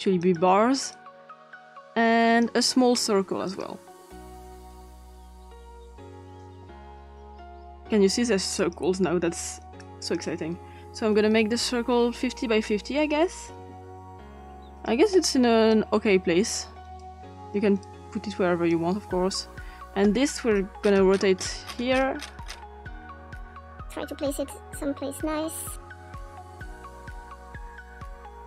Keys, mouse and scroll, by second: 0.2 click, 0.9-2.5 drag, 3.5 click, 4.7-6.4 drag, 8.6 click, 9.8 click, 11.0 click, 11.0 typing, 12.7 click, 13.5-14.9 drag, 13.5 typing, 15.7 click, 17.0-19.7 drag, 20.8-23.5 scroll up 2, 23.5 click, 24.8-26.5 drag, 27.1 click, 27.5-28.1 typing, 27.7 Return, 28.3-28.4 drag.